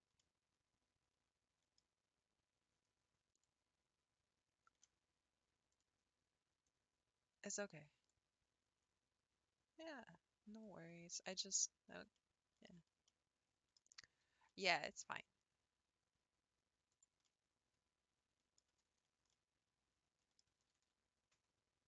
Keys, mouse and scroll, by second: 0.2-3.4 middle drag, 3.4 click, 3.8-4.4 scroll up 5, 5.7 click, 8.1 click, 10.6 drag, 10.9-11.2 scroll down 6, 11.3-12.7 middle drag, 12.7-13.1 scroll up 3, 13.1 middle click, 13.8 scroll down 1, 14.5 s, 17.2-20.7 middle drag, 20.7 g.